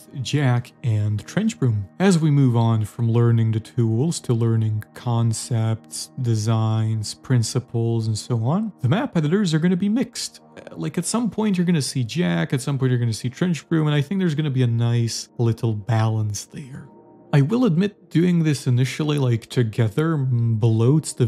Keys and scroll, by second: 0.0-0.4 typing, 1.3 alt+Right, 2.5 Left, 3.4 a, 3.8 Escape, 4.1 a, 4.5 w, 7.3 s, 8.3 d, 8.8 w, 10.0 d, 11.0 s, 12.2 d, 12.5 a, 13.7 d, 14.4 a, 16.6 Escape, 17.1-19.1 typing.